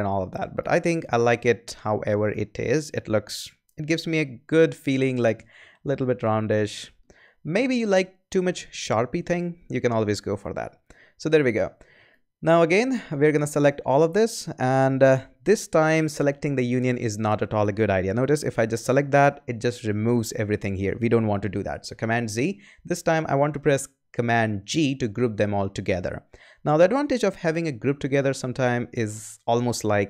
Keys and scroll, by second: 9.1 super+-, 22.0 super+z, 24.9 super+g.